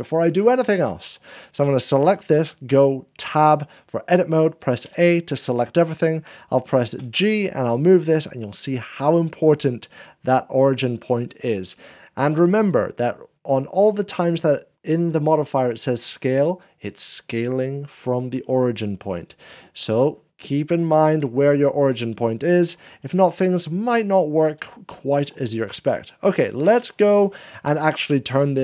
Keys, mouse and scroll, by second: 3.2 Tab, 4.8 a, 7.0 Tab, 7.0-8.1 scroll down 1, 7.0 g, 22.5 Tab, 23.1 scroll, 23.1 middle click, 24.7 shift+middle click, 25.0 click, 25.5 scroll, 25.6 scroll up 1, 25.7 click, 26.2 middle click.